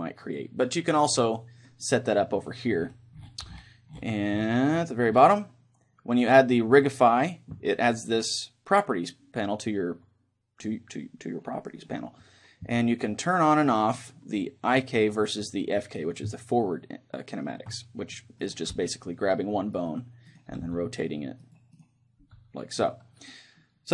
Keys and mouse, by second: 16.5-18.4 middle drag, 18.4-23.9 right drag, 18.9 r, 20.7 r, 22.4 r.